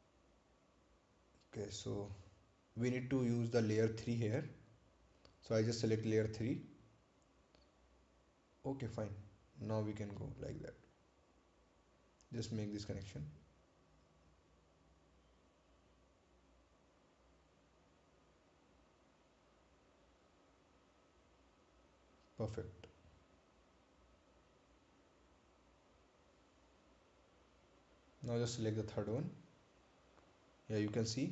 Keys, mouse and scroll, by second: 3.2 right click, 4.6 click, 7.6 click, 15.4 click, 22.2 click, 24.9 right click, 26.2-27.6 scroll down 1, 29.0 ctrl+click, 31.1-31.3 scroll up 1.